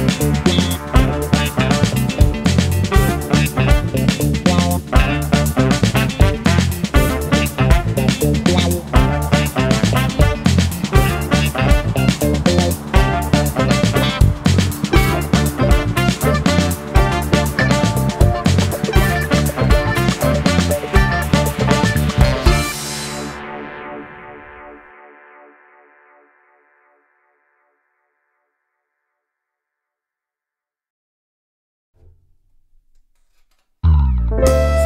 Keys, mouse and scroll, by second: 1.7 click, 2.6-4.4 drag, 6.3 click, 8.2 click, 10.7 click, 12.5 1, 13.0 0, 13.4 Return, 14.4 click, 14.7-15.2 scroll down 4, 16.3 KP_Subtract, 29.3 click, 32.4 ctrl+d.